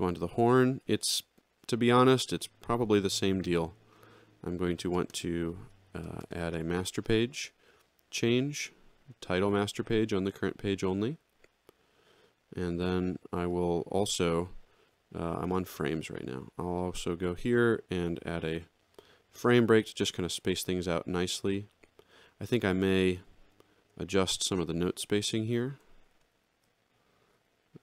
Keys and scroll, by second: 18.5 shift+f, 20.4 alt+x, 25.6 ctrl+alt+Up, 26.4 ctrl+alt+Down.